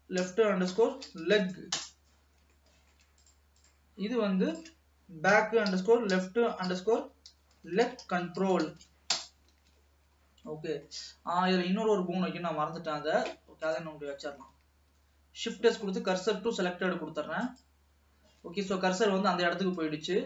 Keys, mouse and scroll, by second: 2.7 shift+middle click, 3.4 click, 3.6 click, 4.7-7.6 drag, 9.7 ctrl+s, 10.1-10.7 scroll down 3, 10.7 middle click, 11.2 scroll up 2, 13.6 ctrl+s, 13.7 click, 14.3 middle click, 15.2 shift+s, 17.7 click, 19.1 ctrl+s, 19.9-20.2 scroll down 2.